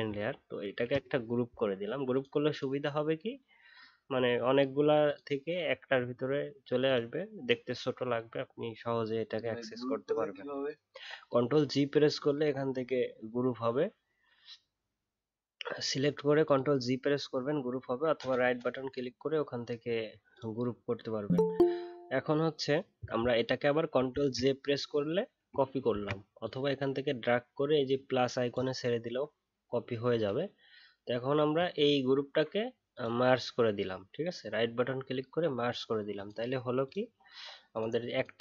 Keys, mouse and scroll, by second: 0.6 ctrl+g.